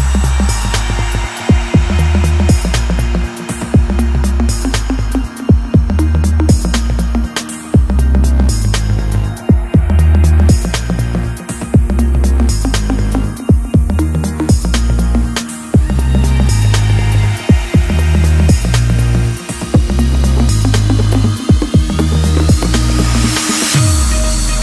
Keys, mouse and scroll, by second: 1.5 shift+click, 3.5 shift+click, 5.4 shift+click, 5.7 shift+click, 8.7-11.8 drag, 13.9 click, 15.5-19.3 drag.